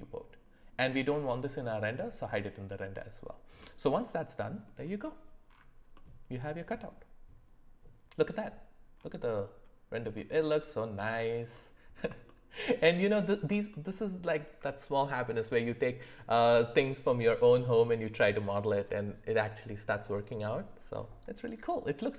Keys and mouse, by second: 2.1 click, 3.6-4.7 middle drag, 5.9 middle click, 11.5 middle click, 12.2-13.5 shift+middle drag, 13.7 ctrl+middle click.